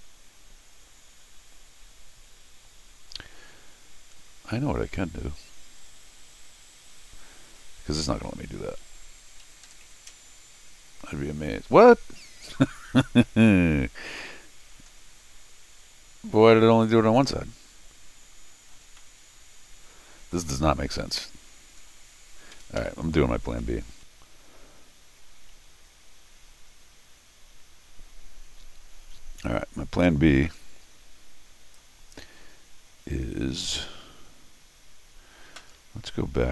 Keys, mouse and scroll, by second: 12.5 middle click, 12.9 middle click, 13.3 middle click, 13.4 middle click, 14.9-15.3 scroll down 2, 19.0 middle click, 19.3-20.3 middle drag, 22.2 scroll down 1, 22.5 Escape, 22.8 Escape, 23.2 scroll up 2, 30.5-31.7 drag.